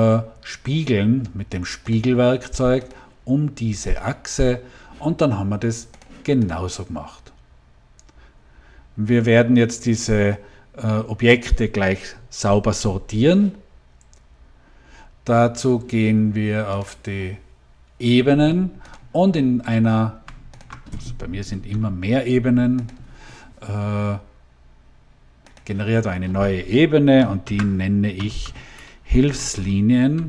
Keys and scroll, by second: 22.2 Delete, 27.3-29.5 typing.